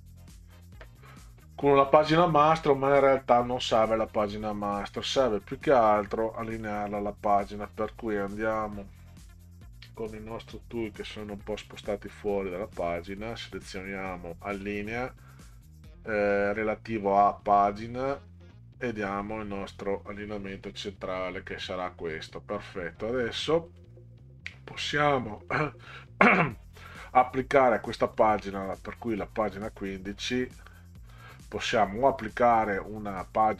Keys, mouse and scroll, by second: 6.2 click, 10.5-11.5 drag, 12.7 click, 17.4 click, 19.2 click, 23.7 click, 25.4 click, 28.0 click, 31.0-31.5 scroll up 4.